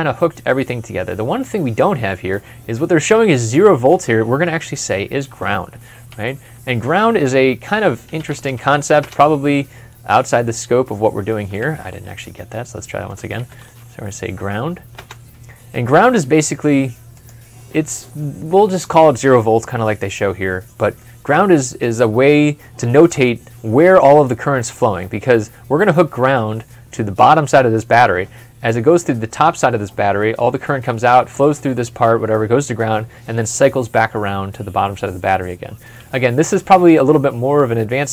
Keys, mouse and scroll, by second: 4.7 middle click, 5.9 a, 7.8-8.5 typing, 11.4 typing, 13.0-13.9 typing, 14.8 Return, 20.8 Return, 20.8 middle click.